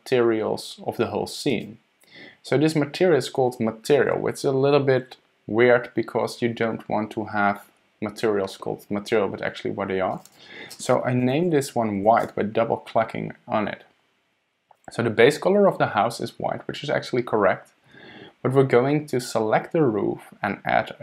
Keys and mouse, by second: 10.1 middle click, 10.4-13.5 middle drag.